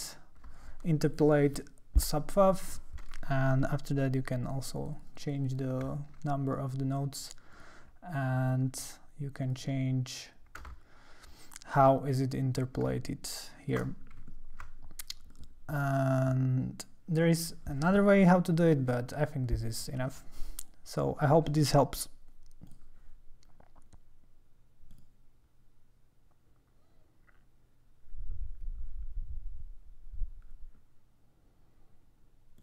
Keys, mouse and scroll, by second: 2.3 click, 3.4 ctrl+middle click, 3.5-4.4 ctrl+scroll, 4.4 click, 4.6 click, 4.8 click, 4.9 click, 5.1 click, 5.4 click, 5.9 ctrl+middle click, 7.5 ctrl+click, 8.5 ctrl+scroll, 9.5 click, 10.7-11.7 drag, 12.9 shift+click, 14.6-15.3 ctrl+scroll, 15.3 click, 22.7 click, 24.9-27.0 drag.